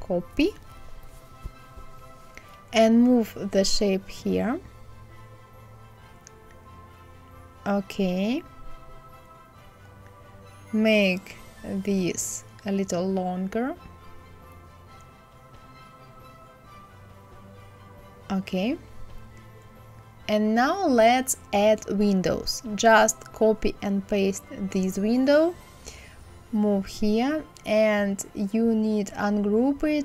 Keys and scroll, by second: 20.4 KP_5, 20.7 KP_0, 20.9 Return.